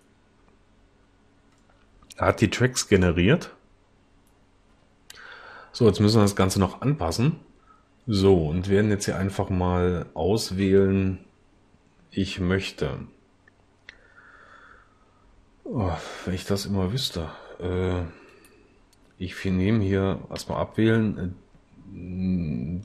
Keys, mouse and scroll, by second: 20.4 a.